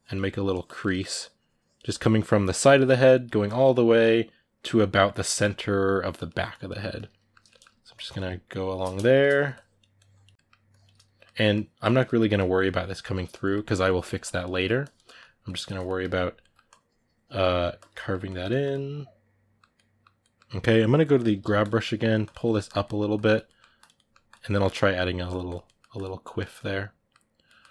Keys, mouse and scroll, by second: 0.0 middle click, 0.3 click, 0.6 middle click, 0.9-2.4 drag, 2.4 middle click, 2.6 click, 2.9 middle click, 3.2 click, 3.5 middle click, 3.8-4.8 drag, 4.8 ctrl+middle click, 5.4 click, 6.0 middle click, 6.3 click, 6.7 shift+middle click, 7.7 click, 8.7 ctrl+shift+middle click, 9.3 click, 10.1 middle click, 10.5 click, 10.7-12.1 ctrl+middle drag, 12.1 click, 12.9-14.0 middle drag, 14.0 click, 14.3 ctrl+middle click, 14.6 click, 14.8-16.4 middle drag, 16.4 click, 17.3 ctrl+middle click, 17.5 click, 17.7-21.0 ctrl+middle drag, 21.0 g, 21.2 f, 22.0 click, 22.2 ctrl+middle click, 22.4 click, 22.6 middle click, 22.9 click, 23.2 middle click, 23.6 click, 23.7 middle click, 24.1 click, 24.2 middle click, 25.1 click, 25.4 middle click, 25.7 click, 26.0-27.7 middle drag.